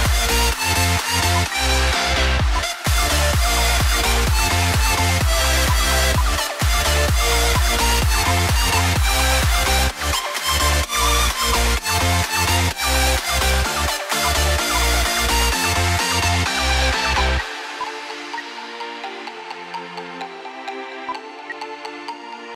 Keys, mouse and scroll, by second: 1.4 ctrl+g, 2.0 double click, 2.4 ctrl+z, 3.8 F2, 7.7 shift+click, 9.0 shift+click, 9.6-10.5 scroll down 1, 10.9 double click, 15.3 scroll down 1, 16.2 double click, 17.2 ctrl+g, 17.8 shift+click, 18.1 typing, 21.3 c.